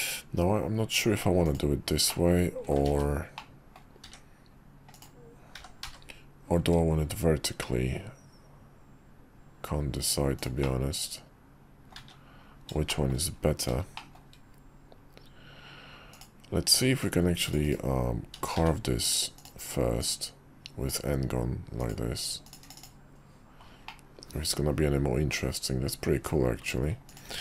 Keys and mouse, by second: 2.1 middle click, 2.9 ctrl+z, 3.3-3.8 middle drag, 4.0 s, 5.5 g, 10.6-11.9 middle drag, 12.9 shift+middle drag, 13.9 middle drag, 16.1-17.8 drag, 18.5 d, 20.0-20.9 drag, 23.8-26.6 middle drag, 27.1 click, 27.3 q.